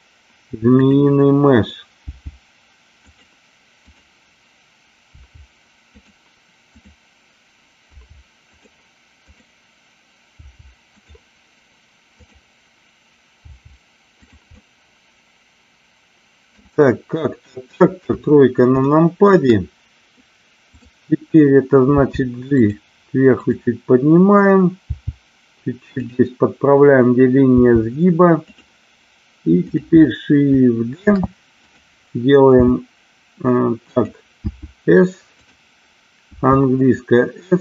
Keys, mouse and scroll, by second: 0.8 click, 2.1 g, 3.1-4.5 drag, 5.0 g, 5.9 click, 6.5 click, 7.8 g, 10.3 g, 10.8 click, 12.2 click, 13.3 g, 14.2 click, 14.6-16.4 middle drag, 18.0 KP_3, 18.8 shift+middle click, 20.7 click, 21.9 g, 22.6 click, 23.3 click, 24.9 g, 25.9 click, 27.4 g, 29.6 click, 31.0 shift+d, 32.5 d, 34.0 click, 34.4 s, 35.4 click, 36.2 s.